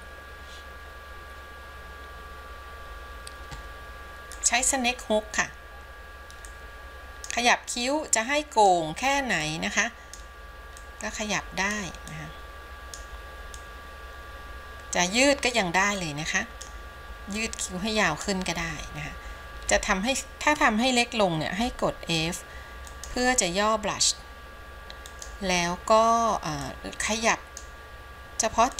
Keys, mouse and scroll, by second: 4.5 click, 6.7 click, 8.0-9.0 drag, 9.6 click, 11.1 click, 12.3 click, 13.8-15.8 drag, 16.3 click, 17.6 click, 21.8 f, 26.8-27.9 drag.